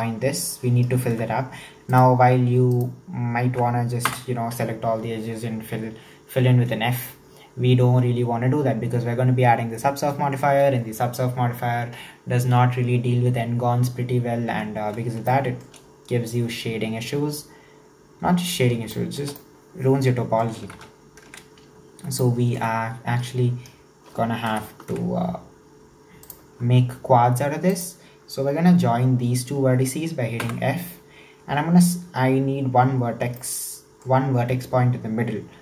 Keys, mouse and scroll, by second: 1.9 alt+right click, 2.7 alt+right click, 4.0 f, 15.2-18.4 shift+middle drag, 18.9-20.8 shift+middle drag, 20.8 ctrl+z, 21.7-22.2 scroll up 2, 22.2-24.5 shift+middle drag, 24.5 ctrl+KP_7, 26.2 right click, 27.7 shift+right click, 30.4 f, 33.3 scroll down 1, 33.4-35.6 middle drag.